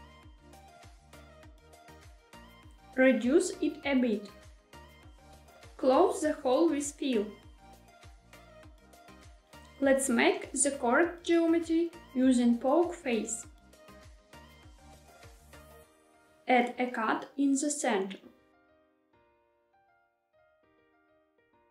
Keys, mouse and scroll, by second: 1.6 click, 2.7 s, 4.8 click, 5.9 f, 11.3-14.4 right drag, 11.3 3, 17.3 ctrl+r, 20.6 click.